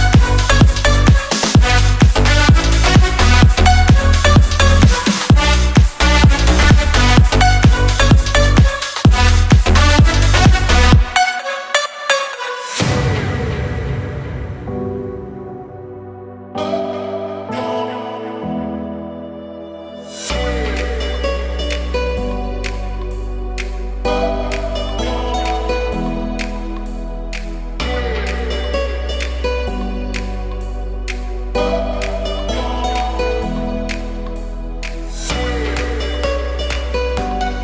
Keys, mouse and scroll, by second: 4.2 m, 5.5 click, 6.5 Up, 8.2 Up, 10.3 Up, 11.5 Up, 12.8 Up, 14.3 Up, 16.2 Up, 17.6 Up, 20.0 Up, 20.8 Left, 24.1 Left, 26.2 Up, 27.4 ctrl+shift+j, 30.1 click, 36.9 BackSpace.